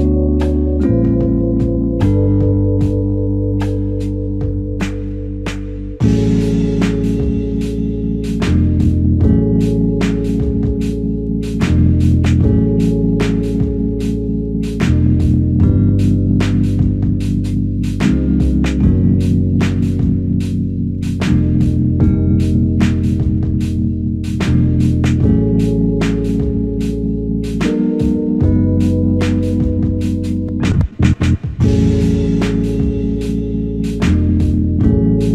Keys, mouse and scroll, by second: 5.4 alt+click, 8.9 ctrl+click, 19.5 alt+click.